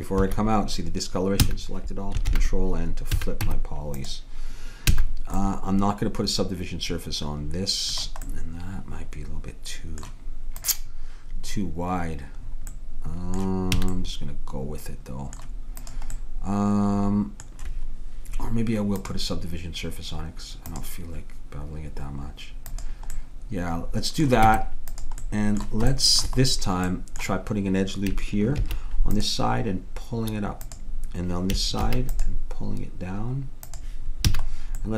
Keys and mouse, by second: 1.5 a, 2.3 ctrl+n, 3.2 a, 3.5 Tab, 5.0 a, 10.6-12.5 drag, 13.8 a, 15.8-17.6 drag, 19.0-20.9 drag, 22.7-24.4 drag, 24.5 Tab, 28.0 middle click, 28.6 ctrl+r, 31.9 ctrl+r, 34.3 a.